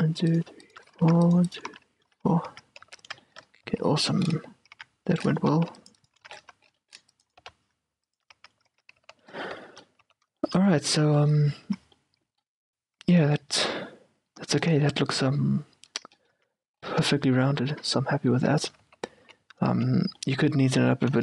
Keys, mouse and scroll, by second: 1.0-6.4 typing, 1.8-3.6 right drag, 4.3-6.1 middle drag, 6.2-9.4 drag, 7.5 right click, 7.5 g, 8.5 a, 8.8 Tab, 9.2 z, 9.4-17.3 middle drag, 10.1 z, 11.8 Tab, 13.3 Tab, 16.4 q, 17.1 q, 17.4-18.7 middle drag, 17.9 q, 18.6 Tab, 18.9-21.2 typing, 20.3 middle click.